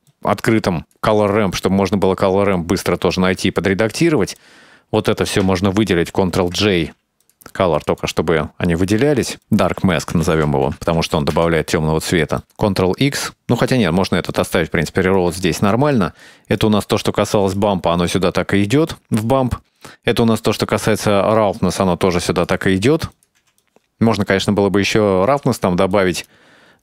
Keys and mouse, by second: 0.2-1.0 drag, 3.2 click, 4.4-5.3 drag, 6.4 ctrl+j, 7.3 click, 7.8 click, 8.1 click, 9.0-9.4 drag, 9.8-11.2 drag, 11.4 middle drag, 12.1 right click, 12.5 ctrl+x, 13.4 shift+right click, 14.3-15.3 right drag, 16.0-16.3 right drag, 16.6-17.6 right drag, 18.1-19.3 drag, 19.9-21.2 drag, 21.9 h, 22.3 click, 23.2 click, 23.5 h, 23.6-25.7 drag, 26.0 click.